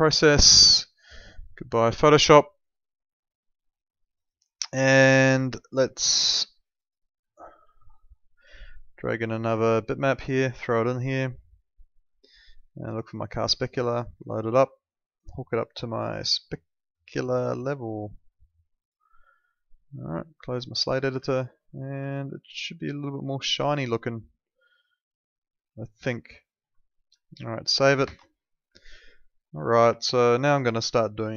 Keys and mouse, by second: 5.2 alt+middle click, 6.7 click, 7.3 alt+middle click, 9.8 click, 18.3 click, 21.3 alt+middle click, 22.1 alt+middle click, 26.8 middle click, 27.3 alt+middle click, 28.8 alt+middle click, 30.0 alt+middle click, 30.9 alt+middle click.